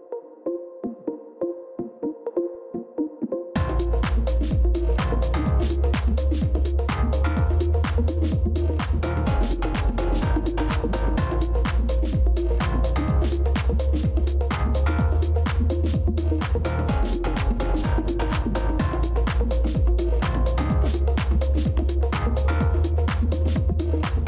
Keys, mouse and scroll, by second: 3.2-3.7 scroll down 1, 6.8-7.8 scroll, 7.8-8.8 ctrl+scroll up 1, 8.9 ctrl+scroll up 1, 9.8-10.2 scroll up 1, 10.5-10.9 scroll down 1, 13.5-14.8 scroll down 1, 15.6-16.3 scroll, 16.3-16.6 ctrl+scroll up 1, 17.0-18.2 ctrl+scroll up 1, 20.2-20.8 ctrl+scroll up 1, 20.8 ctrl++, 22.9 ctrl+0.